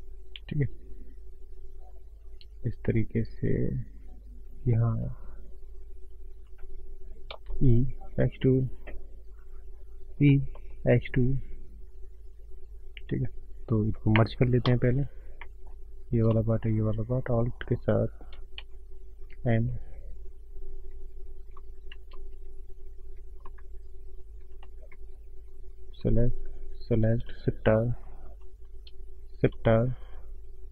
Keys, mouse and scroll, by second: 7.4 e, 10.6 e, 14.6 1, 14.8-15.1 scroll up 3, 15.4 shift+middle click, 16.2 click, 17.6 right click, 19.4 ctrl+m, 23.0 alt+m, 24.3 m, 25.8 click, 26.6 shift+click, 28.2 shift+r, 29.2 click, 29.7 click.